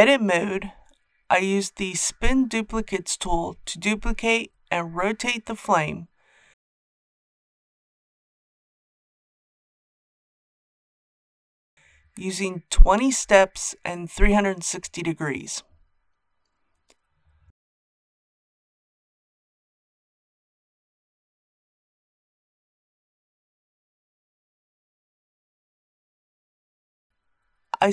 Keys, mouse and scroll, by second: 1.7-11.1 drag, 14.8-16.2 typing, 15.3 Tab, 19.8 click, 21.0-24.1 middle drag, 24.3-27.9 drag.